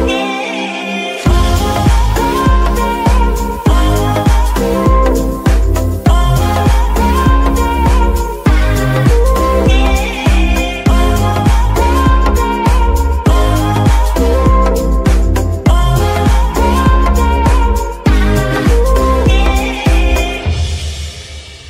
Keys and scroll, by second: 1.1 g, 1.7 Escape, 3.6 g, 4.3 Escape, 8.6 g, 9.4 Escape, 10.2 g, 11.6 Escape, 18.7 g, 19.9 Escape.